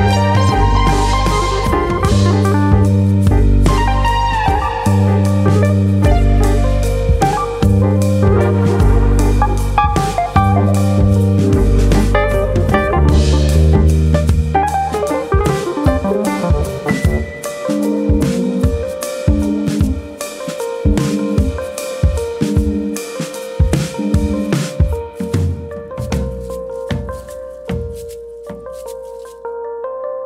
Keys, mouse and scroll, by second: 0.0 click, 1.0 KP_3, 1.4-2.5 scroll up 2, 1.9 Tab, 2.8 alt+click, 3.3 click, 5.6 ctrl+z, 6.2 click, 7.6 alt+click, 8.5 s, 9.5 click, 9.8 click, 12.3 alt+click, 13.3 click, 15.0 scroll down 1, 15.1 middle click, 16.1 middle click, 17.7 middle click, 18.3 middle click, 18.8 click, 19.2 middle click, 21.6 KP_1, 23.0 Tab, 23.8 scroll up 1, 24.1 shift+middle click, 24.5-25.0 scroll up 1, 25.0-25.4 scroll down 1, 26.8 shift+middle click, 28.1-29.3 scroll down 1.